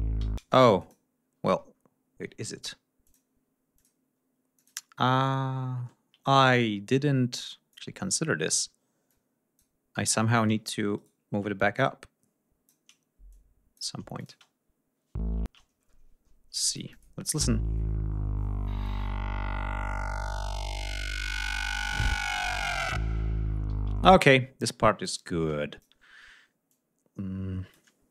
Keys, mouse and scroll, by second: 0.2 ctrl+d, 0.4 space, 0.8 click, 1.4 ctrl+scroll down 2, 2.6 d, 3.0 click, 3.7 click, 4.5 click, 6.2 ctrl+scroll up 2, 7.4 click, 9.1 click, 10.0 click, 10.9 shift+right click, 11.7 shift+click, 13.3 click, 14.2 click, 14.3 space, 15.4 space, 15.5-16.0 scroll down 2, 16.7 ctrl+click, 17.2 space, 23.7 g, 23.9 ctrl+scroll down 1, 24.2 ctrl+space, 25.1-26.0 drag, 26.0 scroll up 2, 26.7-27.9 drag, 28.0 scroll down 3.